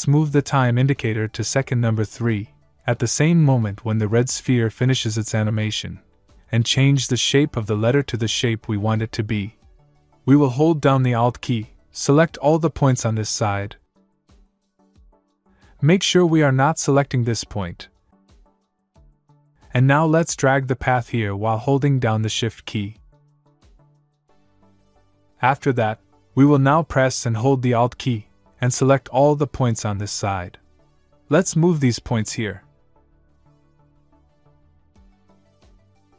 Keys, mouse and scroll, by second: 2.7 click, 10.9 alt+Num_Lock, 12.1 alt+click, 16.1 scroll up 1, 17.3 middle click, 20.9 click, 28.6 alt+Num_Lock, 29.1 alt+click, 32.1 click.